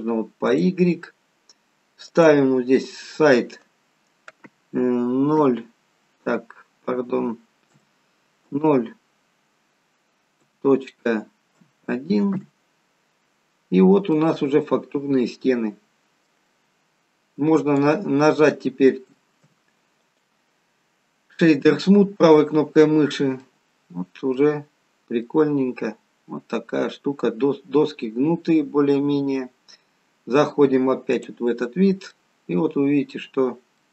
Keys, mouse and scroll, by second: 2.6 click, 13.7-14.1 scroll up 2, 14.2 middle click, 16.9 scroll down 1, 17.8 right click, 19.0 Tab, 20.2 right click, 23.5 middle click, 24.8-25.3 scroll up 1, 25.3 middle click, 25.3-26.3 scroll up 1, 31.3 click, 31.8-32.2 scroll down 2, 32.2 middle click, 33.4-33.9 scroll down 2, 33.8 middle click.